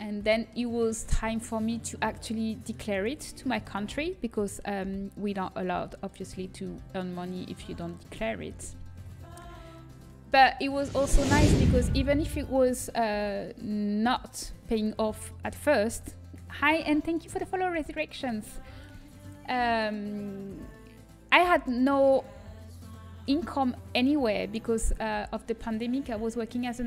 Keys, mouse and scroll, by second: 0.6-1.6 middle drag, 1.6 click, 8.9 KP_1, 25.0-26.8 middle drag.